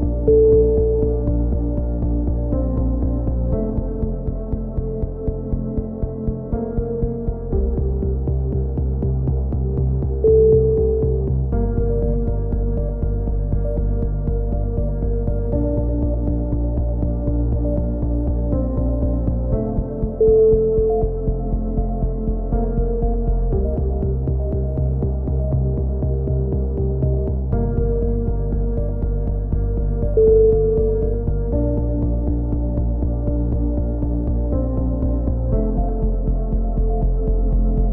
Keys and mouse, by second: 0.3 shift+q, 0.4 a, 2.0 c, 2.5-4.7 right drag, 2.5 shift+q, 2.6 a, 3.2 click, 3.7 c, 4.5 shift+q, 4.8 a, 4.9 click, 5.9-7.1 right drag, 6.6 f, 6.6 a, 7.1 click, 7.8-9.9 right drag, 8.4 f, 9.5 click, 10.1 f, 10.2 a, 10.3 click, 11.0-12.0 drag, 11.5-13.7 right drag, 12.1 f, 13.4 f, 13.7 click, 13.7 a, 14.4-15.7 right drag, 15.6 f, 15.7 a, 16.2 click, 16.4 click, 16.7 right click, 16.9 middle click, 17.5-18.9 right drag, 17.5 f, 18.2 f, 18.3 a, 18.9-20.8 drag, 20.1-21.4 right drag, 20.8 f, 21.2 f, 21.3 a, 21.9 click, 22.1 click, 23.2 right click, 23.7 f, 23.9-25.1 right drag, 24.6 f, 24.6 a, 25.1 click, 26.1 f, 26.2-27.2 right drag, 26.7 f, 26.7 a, 27.2-28.8 drag, 28.7-29.9 right drag, 29.2 f, 29.7 f, 29.9 a, 30.1 click, 31.2 right click, 31.2 f, 31.8 f, 32.0 a, 33.5 f, 34.6 right click, 34.6 f, 34.7 a, 34.8 click, 35.9 z, 36.2 click, 36.6 click, 36.6 z.